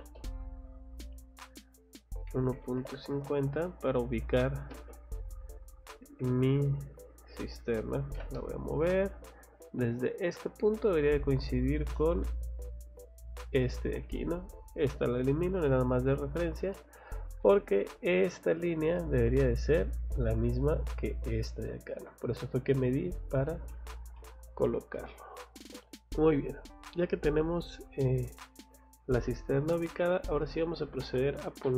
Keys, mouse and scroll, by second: 0.0 space, 0.9 click, 4.2 middle click, 4.7 space, 5.5 click, 6.0 Escape, 6.4 click, 6.8 click, 8.0 m, 8.2 space, 9.1 middle click, 10.0 click, 10.2 scroll down 2, 10.7-11.1 scroll up 2, 11.8 scroll up 2, 12.2 scroll down 2, 13.5 click, 14.4 click, 14.7 click, 16.8 click, 18.5 scroll down 2, 19.0 middle click, 19.4 scroll up 2, 23.2 scroll down 1, 23.5 Escape, 23.7 middle click, 24.2 middle click, 24.6 scroll down 1, 24.9 middle click, 25.9 middle click, 25.9 scroll up 1, 29.6 scroll down 1, 30.4 middle click.